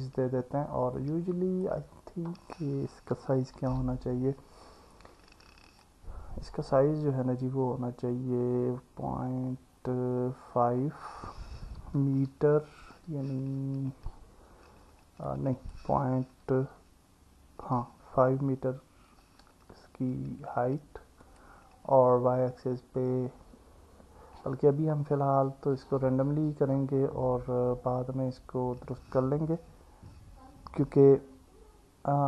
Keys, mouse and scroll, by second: 1.1 click, 3.6 n, 5.8-19.6 drag, 21.3-32.2 drag.